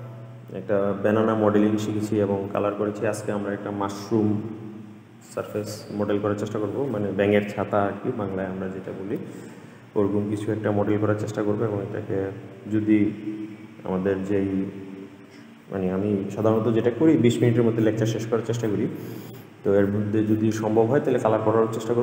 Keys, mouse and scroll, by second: 4.9 scroll up 1, 5.1 scroll down 1, 5.3-5.8 scroll up 1, 5.8 middle click, 6.1 shift+click, 6.2 scroll down 2, 6.5 shift+click, 7.0 shift+click, 7.3 shift+click, 7.6 shift+click, 8.0 middle click, 8.9 shift+d, 11.9 shift+d, 13.2 r, 16.1 shift+d, 17.4 r, 18.8 shift+d, 20.2 r, 21.5 click, 21.7-22.0 middle drag.